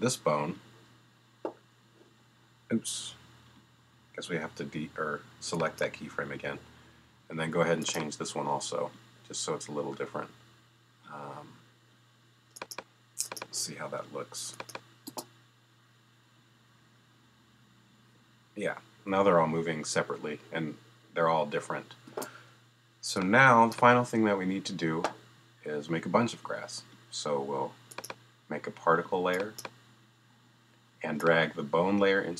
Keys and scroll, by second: 15.1 space, 22.1 space.